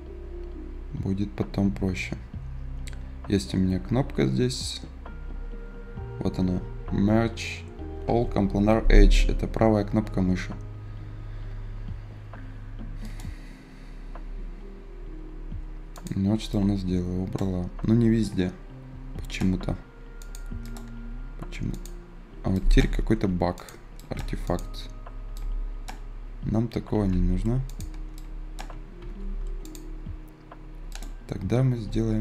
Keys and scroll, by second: 26.8 ctrl+z, 28.9 ctrl+z.